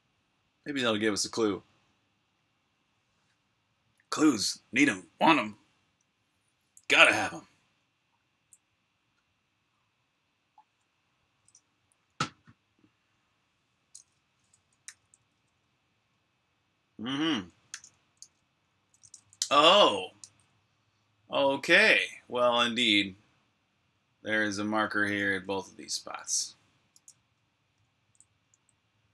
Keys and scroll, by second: 11.6-13.1 typing, 15.7-20.5 typing, 22.1-23.1 typing, 24.5-25.6 typing, 26.7-29.1 typing.